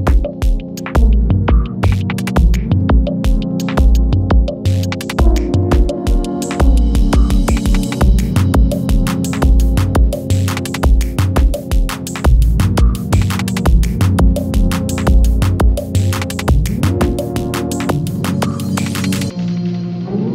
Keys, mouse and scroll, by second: 0.3 space, 2.5 click, 4.1 space, 6.7 click, 7.0 space, 8.1-8.7 click, 9.3 ctrl+a, 10.3 ctrl+shift+c, 13.0-15.5 typing, 15.7 Return, 17.6 click.